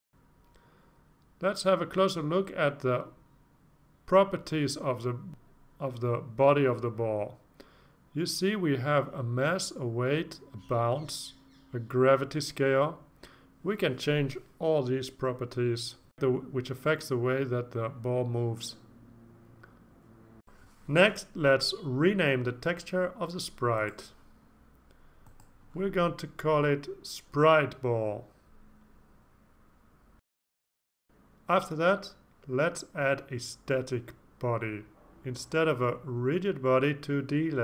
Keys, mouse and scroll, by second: 0.8 click, 4.3 click, 13.3-14.0 scroll down 2, 23.8 click, 24.5 click, 25.3 click, 26.1 click, 27.5-29.2 typing, 29.7 Return, 31.6 click, 33.5 click, 34.9-37.6 typing.